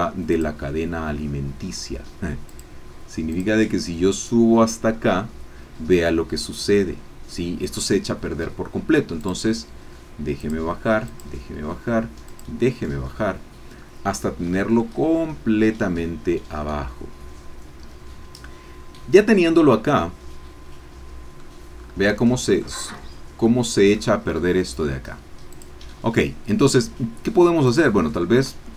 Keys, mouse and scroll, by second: 0.3 click, 2.4 click, 3.3 click, 9.2 click, 10.4 click, 11.0 click, 12.2 click, 14.4-14.7 scroll down 2, 14.8-21.7 drag, 21.7-22.3 scroll up 1, 22.3 shift+click, 22.8 shift+scroll up 1, 22.8 shift+scroll down 1, 23.1 shift+scroll up 1, 23.1 shift+scroll down 3, 23.4 click, 25.5 click, 27.7-28.7 drag.